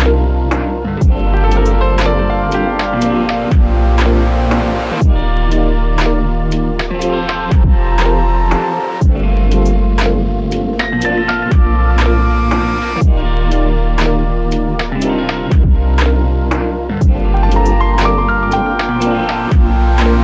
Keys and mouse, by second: 0.8 alt+click, 4.2 double click, 5.3 shift+click, 9.0 shift+click, 11.1-11.6 typing, 13.2 right click, 14.6 typing, 16.3 typing, 17.8 alt+shift+click.